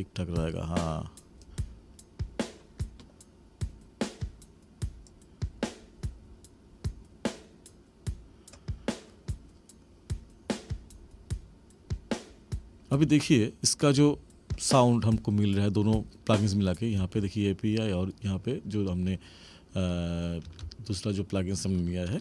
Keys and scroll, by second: 12.9 space, 16.9 space.